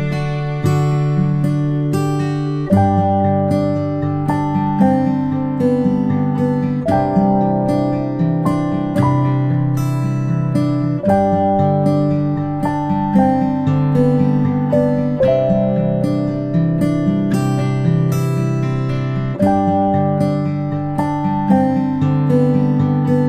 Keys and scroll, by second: 20.2 ctrl+z.